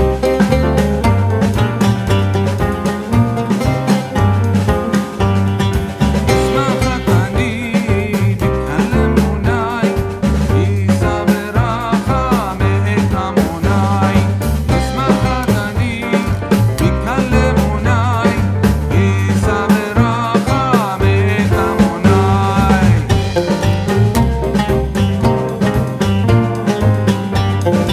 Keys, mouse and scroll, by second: 1.6 click, 5.3 alt+scroll down 1, 5.8 space, 5.9 click, 5.9 space, 6.8 click, 7.9-11.0 typing, 12.3-15.8 drag, 15.5-16.9 typing, 18.5-20.6 drag, 20.6-22.4 drag, 23.5-24.9 typing, 25.0-27.9 drag.